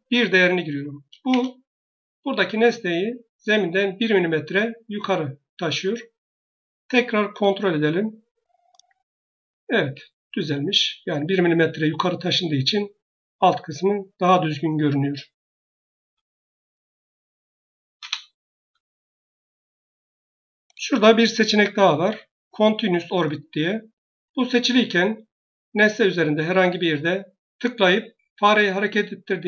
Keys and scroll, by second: 1.1 Return, 2.1 Escape, 17.9 Return.